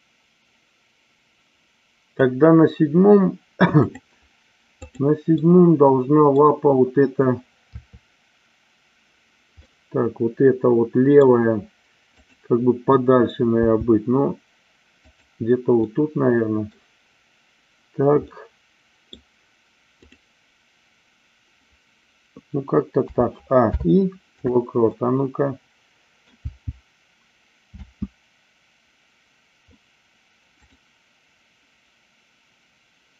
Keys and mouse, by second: 3.7 click, 4.7-5.7 drag, 5.8 middle click, 7.6 KP_3, 9.6-11.2 middle drag, 12.2 click, 13.6 g, 15.0 click, 15.9 middle click, 18.3-19.1 middle drag, 23.0 a, 23.6 i, 24.9-26.3 middle drag, 26.4 v, 27.7 space, 30.6 click.